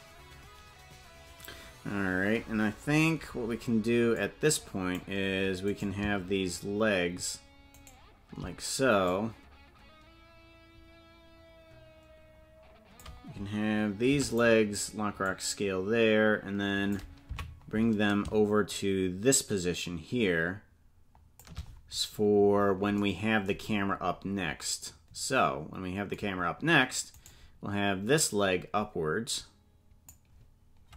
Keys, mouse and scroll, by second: 0.6 ctrl+g, 2.5-3.0 scroll down 3, 3.2 scroll down 2, 3.5-4.2 scroll up 2, 4.2 click, 5.8 right click, 7.9 shift+right click, 9.1-13.1 drag, 15.3-17.0 drag, 17.4 Left, 18.7-21.5 shift+drag, 23.6-24.7 scroll down 9, 27.3 right click, 28.2-30.2 drag.